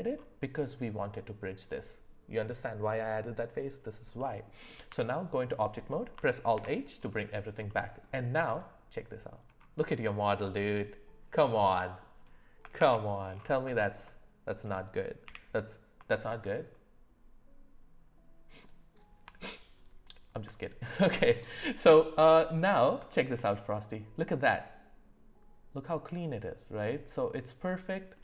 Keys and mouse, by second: 0.3 [, 4.2 middle click, 4.9 Tab, 6.5 alt+h, 7.7 middle click, 9.9-12.0 middle drag, 12.8 shift+c, 13.8 shift+middle drag, 15.2 f, 16.2 shift+middle click, 20.8 shift+middle click, 21.9 click, 22.3 middle click, 23.1 shift+middle click, 23.5-28.2 middle drag.